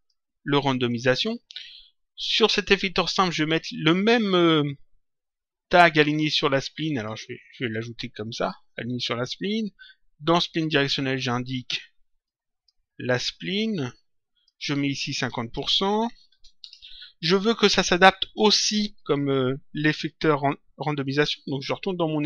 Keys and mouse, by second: 2.5 click, 6.8 right click, 8.9 click, 12.1 click, 13.5 click, 15.2 click, 16.5 Return.